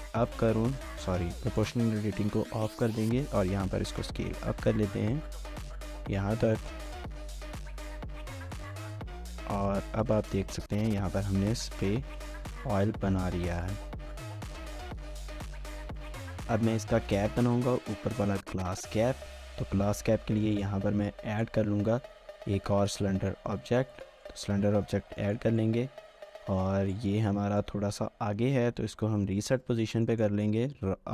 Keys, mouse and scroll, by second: 0.1 s, 0.7 right click, 2.4 s, 7.3 scroll down 1, 7.5 middle click, 8.1 Tab, 8.8 scroll down 1, 9.2 middle click, 12.4 scroll down 1, 12.9 shift+middle click, 15.8 scroll down 1, 16.0 shift+middle click, 16.9 1, 18.4 scroll up 1, 18.6 1, 18.8 shift+middle click, 19.2 scroll up 1, 19.5 shift+middle click, 21.2 shift+middle click, 23.1 a, 24.3 scroll down 1, 24.9-25.6 scroll up 3, 25.0 a, 25.2 shift+middle click, 26.1 scroll down 1, 26.3 middle click, 26.8 scroll down 1, 27.2 middle click, 28.7-29.2 typing, 29.8 scroll down 1, 30.1 shift+middle click.